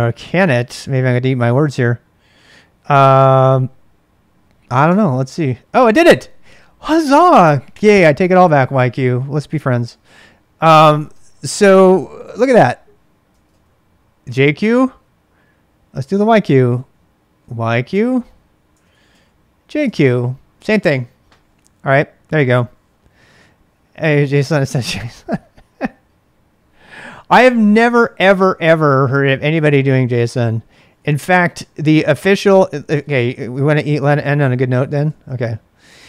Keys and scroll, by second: 0.0-1.2 typing, 2.8 x, 3.0 x, 4.8 Return, 10.9 ctrl+[, 11.1 k, 11.9 Return, 13.3 ctrl+[, 13.4 k, 14.2 k, 15.7 k, 16.1 k, 17.9 Return, 18.0-19.1 typing, 18.7 ctrl+[, 19.8 Return, 30.6-31.4 typing, 32.6-36.0 typing.